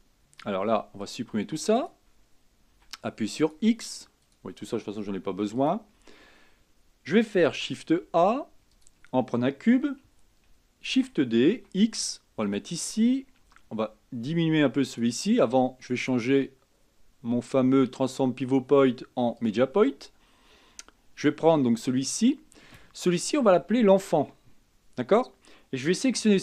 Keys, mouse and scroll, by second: 0.6 b, 2.9 x, 4.4 click, 5.5 x, 7.6 shift+a, 11.1 shift+d, 13.6 s, 16.2-19.4 drag.